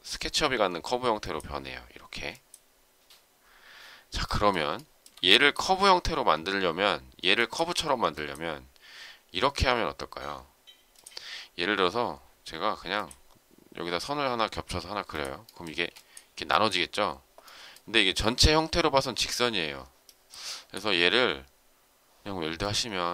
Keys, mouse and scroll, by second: 4.7 shift+middle click, 15.7 space.